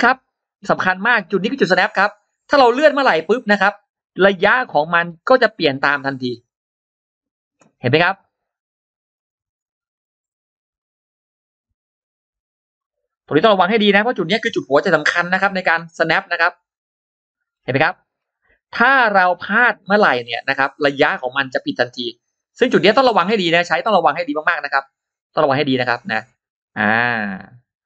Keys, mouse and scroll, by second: 1.7-3.4 drag, 3.6-3.9 scroll down 2, 5.1-6.9 drag, 7.1 click, 7.5 scroll down 2, 9.0 click, 9.3 click, 9.8-10.1 scroll up 2, 10.6-11.9 drag, 12.5 click, 12.8 click, 14.7 click, 15.0-17.1 drag, 17.3-17.6 scroll down 2, 17.9-18.2 scroll up 2, 19.3 click, 19.8 click, 20.0 click, 22.2-25.4 drag, 25.8 click.